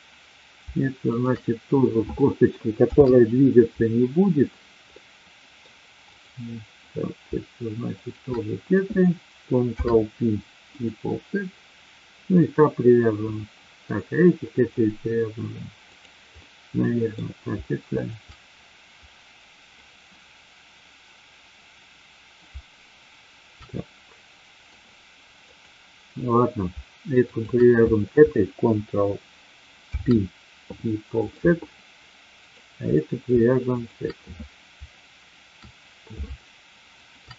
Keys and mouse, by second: 1.0 shift+click, 2.8 ctrl+p, 5.0 middle click, 9.7 ctrl+p, 12.3-13.8 middle drag, 15.8 click, 16.6 middle click, 18.0 shift+click, 23.7-24.7 middle drag, 25.6 click, 27.2 shift+click, 29.8 ctrl+p, 32.3 click, 33.7 shift+click.